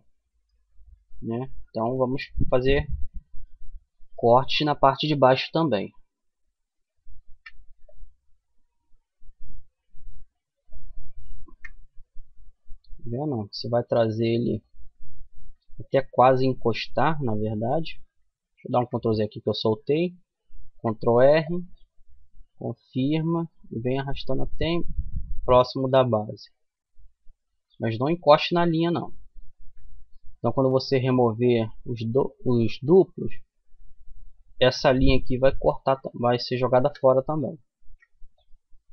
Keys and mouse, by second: 0.2-1.6 middle drag, 6.5 ctrl+r, 10.6 KP_Decimal, 11.8-13.0 middle drag, 13.1 middle click, 14.5-15.6 middle drag, 16.1 middle click, 17.8 ctrl+z, 19.8 ctrl+r, 28.7 ctrl+r, 37.0 ctrl+r.